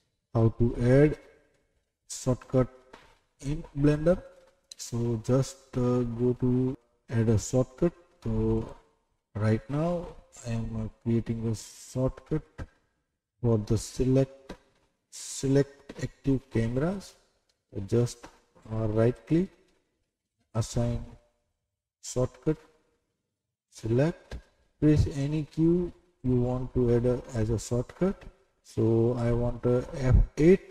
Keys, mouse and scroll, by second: 1.5 middle click, 3.0 scroll up 2, 3.9 middle click, 8.5 click.